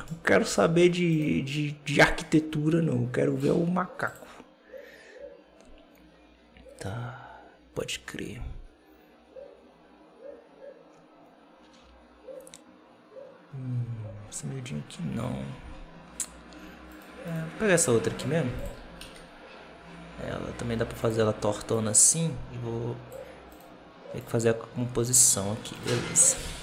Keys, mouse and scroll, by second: 0.4 alt+a, 0.5-1.0 scroll up 1, 1.0 right click, 1.9-7.1 drag, 17.2 right click, 17.8 alt+d, 18.6 r, 21.6-23.4 drag, 23.4 right click, 24.1-25.7 drag, 25.7-26.1 shift+right drag, 26.1 shift+middle drag, 26.3-26.6 scroll up 5.